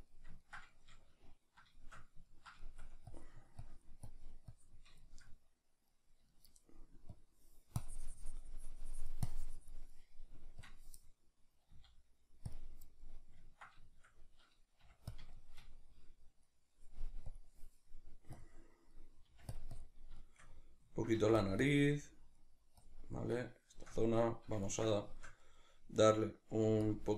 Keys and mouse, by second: 3.2-5.1 drag, 5.1-7.8 shift+middle drag, 7.8-12.6 drag, 12.6 z, 13.0-18.3 middle drag, 14.8 f, 15.1 click, 18.3 click, 18.9-22.8 middle drag, 19.3 f, 19.5 click, 21.1 f, 21.4 click, 22.8 click, 23.1-26.9 middle drag, 26.6 f, 26.9 click.